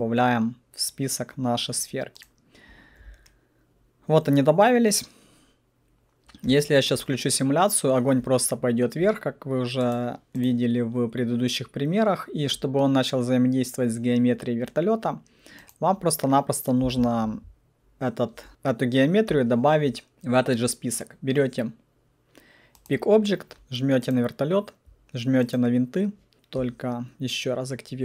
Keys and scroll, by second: 16.8 alt+F4.